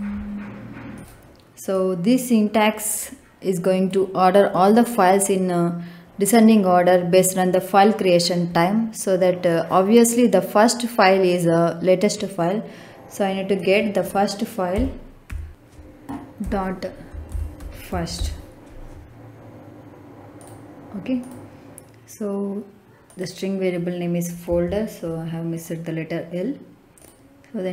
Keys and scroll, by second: 14.6 ., 15.2 f, 16.3-18.1 typing, 24.4 l.